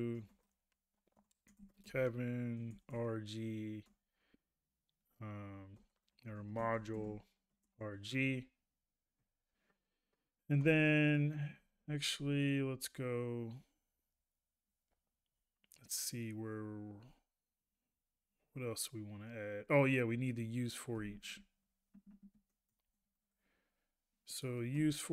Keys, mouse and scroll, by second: 11.6 ctrl+a, 21.1 ctrl+a.